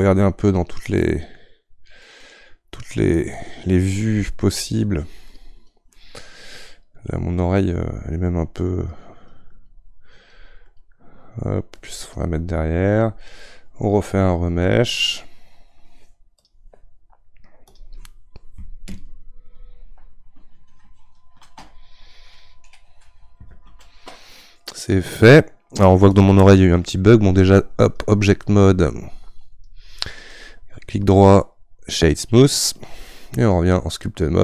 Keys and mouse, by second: 1.0-4.1 middle drag, 4.1-32.2 drag, 32.2-33.5 right drag, 33.5 click.